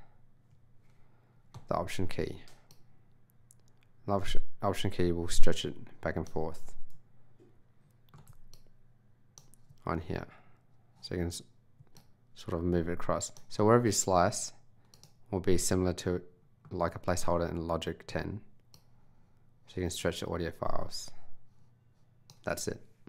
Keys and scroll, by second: 15.6 s.